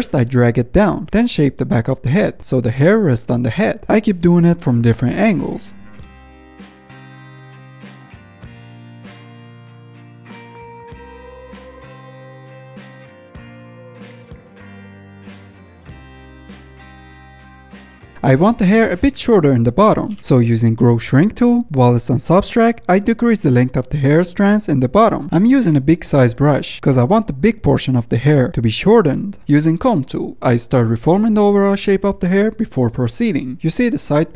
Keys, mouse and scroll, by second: 0.3 shift+middle drag, 0.5-2.0 drag, 2.0 middle click, 2.1 click, 2.2 scroll up 1, 2.3 click, 2.4 middle click, 2.6 click, 2.9 shift+middle click, 3.0 f, 3.2 click, 3.6 middle click, 3.7 click, 3.9 shift+middle click, 4.2 f, 4.4 click, 5.0 middle click, 5.2 click, 5.3 middle click, 5.6 click, 5.7 shift+middle click, 6.2 f, 6.3 middle drag, 6.5-6.9 drag, 6.9 middle click, 7.3-8.2 drag, 8.2-8.7 middle drag, 8.7-10.5 drag, 10.5 middle click, 10.8-11.3 drag, 11.3 middle drag, 11.5 scroll down 1, 11.6 middle click, 11.7 scroll up 1, 11.8 shift+middle drag, 12.0 drag, 12.2 middle drag, 12.3 click, 12.4 middle click, 12.5 drag, 12.8 middle drag, 12.9 click, 13.0 middle click, 13.3 click, 13.4 middle click, 13.5 click, 13.7 middle click, 13.8 scroll down 1, 13.9 shift+middle click, 14.0 scroll up 1, 14.0 drag, 14.1 middle click, 14.5 drag, 14.8 ctrl+z, 14.8 f, 14.9-15.3 drag, 15.3 middle drag, 15.6 scroll down 1, 15.7-16.6 middle drag, 16.6 click, 17.1 shift+middle click, 17.2-18.1 drag, 18.1-18.7 middle drag, 18.7 scroll down 1, 18.8 middle click, 19.3 ctrl+z, 20.7-21.8 drag, 21.8 f, 22.0 drag, 22.2 ctrl+z, 22.3 drag, 22.6 f, 22.7-23.5 drag, 23.5 f, 23.7 scroll down 1, 24.1 click, 24.3-24.8 middle drag, 24.8-25.7 drag, 25.7 middle click, 25.8-26.2 drag, 26.2 middle drag, 26.4 f, 26.7-27.9 drag, 27.9 ctrl+z, 28.0 ctrl+z, 28.1-29.9 drag, 29.9 middle click, 30.4 click, 30.5-30.9 middle drag, 30.9 ctrl+z, 31.1 f, 31.4-31.8 drag, 31.8 ctrl+z, 31.9-33.7 drag, 33.7-34.1 middle drag, 34.1 click, 34.2 middle click.